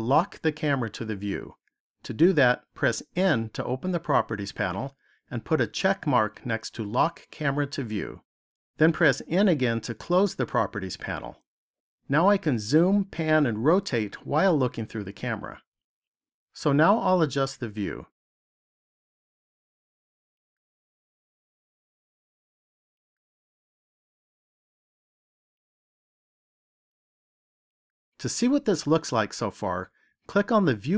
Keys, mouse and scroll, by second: 3.0 n, 5.9 click, 9.2 n, 17.2-18.4 scroll up 6, 19.2 middle click, 23.2 shift+middle click, 26.2 shift+middle click.